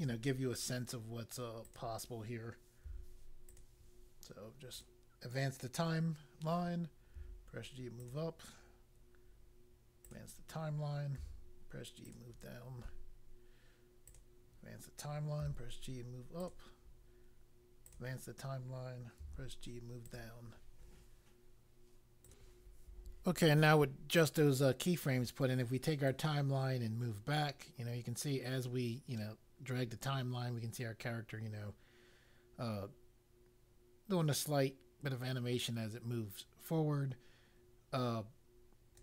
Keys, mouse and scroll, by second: 1.6 click, 2.8 g, 3.5 click, 4.7 click, 7.2 g, 8.0 click, 10.0 click, 11.1 g, 12.0 click, 14.0 click, 15.4 g, 16.4 click, 18.0 click, 19.1 g, 20.0 click, 22.2 click, 26.0 right click.